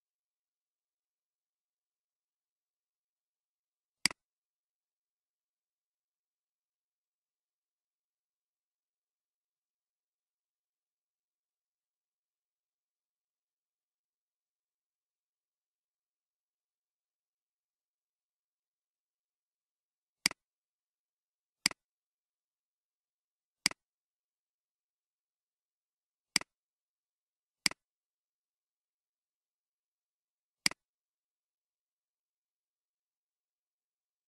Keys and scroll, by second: 22.7 ctrl+c, 24.6 ctrl+v.